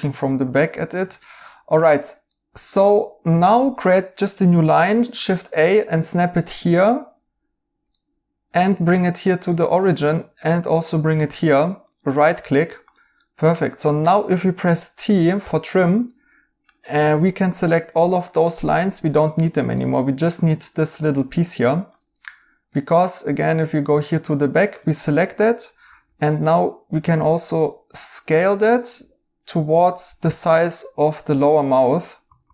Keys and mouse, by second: 1.1 right click, 4.6 a, 7.8 right click, 9.4 right click, 11.8 right click, 15.4 t, 19.1 right click, 21.1 right click, 22.7 right click, 23.9 right click, 24.7 2, 25.8 typing, 30.0-30.7 typing, 31.5 right click, 32.1-32.5 typing.